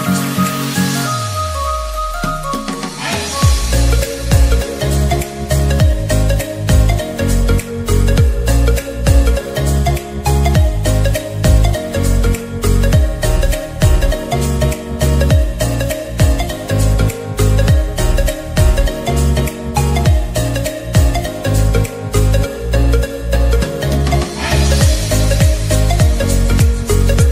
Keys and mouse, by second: 10.0-13.5 drag, 14.7 click, 17.2 click, 24.1 ctrl+z, 26.1-27.3 drag.